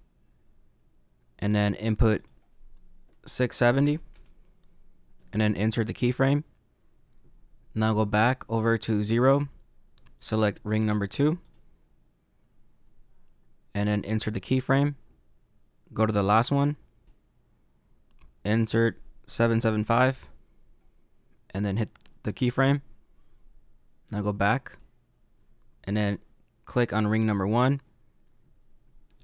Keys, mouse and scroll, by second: 4.1 click, 5.9 click, 8.1 click, 11.5 click, 14.7 click, 15.9 click, 20.1 KP_7, 22.3 click, 24.1 click, 26.8 click.